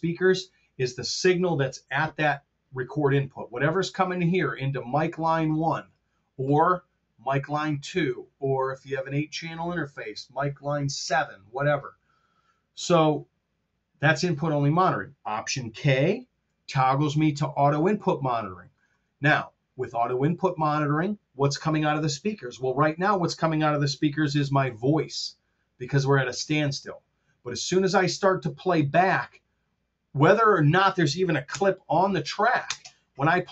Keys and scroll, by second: 16.1 alt+k, 31.4 BackSpace, 32.6 space.